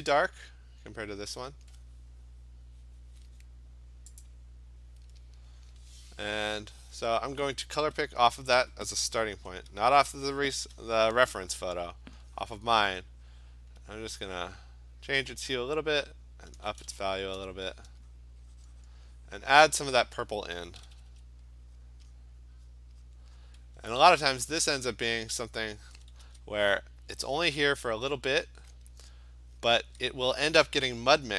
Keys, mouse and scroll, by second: 4.3 click, 9.4 click, 10.5 alt+click, 12.1 click, 14.1 click, 15.1 click, 15.8 click, 17.5 Return, 18.2 click, 18.8 click, 19.2 click, 19.6 click, 20.0 click, 20.8 ], 21.0 ], 21.1 ], 21.8 click, 22.2 click, 22.8 click, 23.1 click, 23.4 click, 25.9 [, 26.3 [, 26.8 click, 27.4 click, 27.9 click, 27.9 ], 28.2 ], 29.8 [.